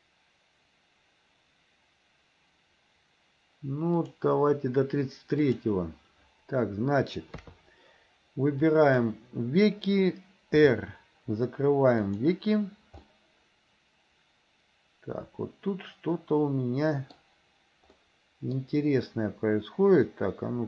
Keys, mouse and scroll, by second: 4.1 click, 5.6 click, 7.4 KP_3, 8.7 click, 10.6 r, 13.1-17.2 middle drag, 18.1 middle click, 20.1-20.6 middle drag.